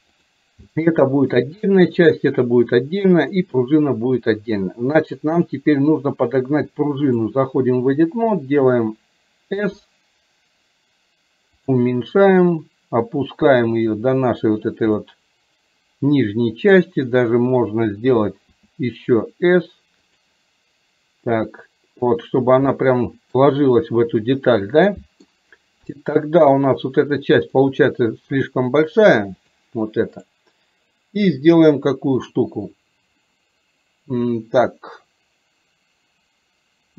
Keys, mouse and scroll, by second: 0.2 drag, 0.9-1.4 shift+middle drag, 2.1 click, 3.4 click, 5.5-7.4 drag, 12.6-13.7 drag, 15.1-16.9 middle drag, 21.4-22.5 drag, 22.7 middle click, 24.7 middle click, 25.4 scroll down 1, 29.1 click, 30.2 click.